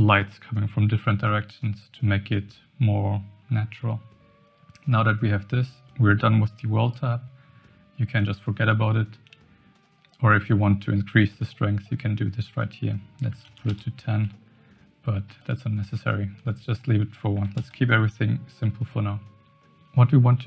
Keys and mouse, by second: 11.3-13.7 drag, 15.4-16.4 drag, 16.7 click.